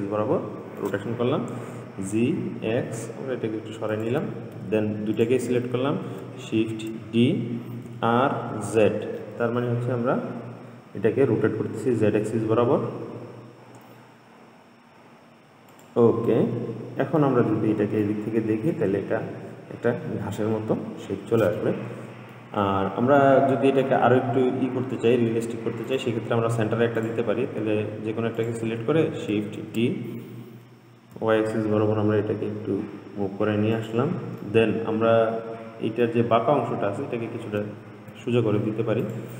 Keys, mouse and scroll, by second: 2.0 g, 5.4 shift+click, 6.8 shift+d, 16.5-17.7 middle drag, 17.7-18.3 scroll down 4, 18.3-20.2 middle drag, 20.2-21.8 scroll up 3, 21.8-24.4 middle drag, 24.4 scroll up 2, 26.1 click, 27.2 click, 28.6 click, 29.8 shift+d, 34.7-37.8 middle drag, 38.3 Tab.